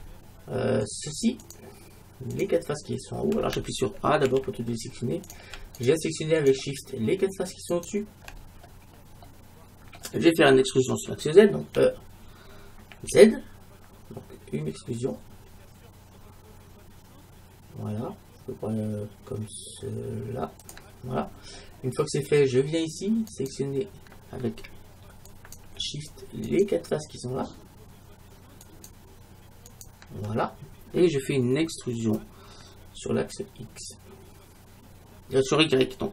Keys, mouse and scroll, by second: 0.5 scroll down 1, 0.9-4.3 right drag, 4.3 a, 5.3-9.6 right drag, 8.5-11.1 middle drag, 11.8 e, 20.8-22.6 drag, 21.2-23.6 middle drag, 23.3-25.3 right drag, 28.1 right click, 28.7-31.7 right drag.